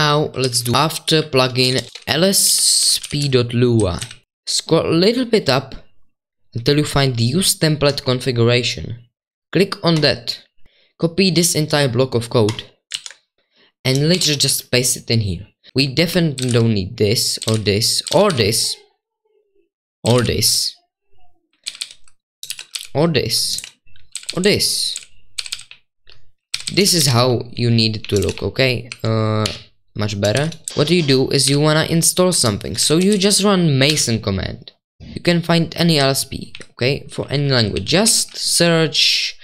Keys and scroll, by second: 0.3-4.5 typing, 12.9 super+2, 14.1 ctrl+v, 15.7-18.1 typing, 20.0 typing, 21.8-29.4 typing, 30.4 Return, 35.1-39.4 typing.